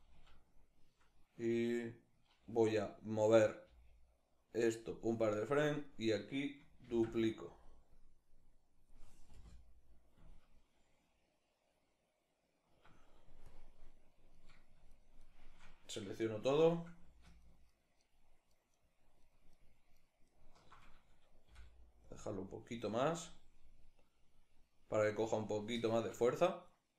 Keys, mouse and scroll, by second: 3.3 g, 4.6 click, 5.6 right click, 6.5 shift+d, 7.7-14.0 drag, 9.0 space, 12.4 Escape, 14.0-14.6 right drag, 14.8-17.2 shift+right drag, 17.4 alt+shift+right click, 18.2 alt+shift+right click, 18.4 alt+shift+right click, 19.9 alt+shift+right click, 21.1 g, 21.8 click, 23.1-26.9 drag.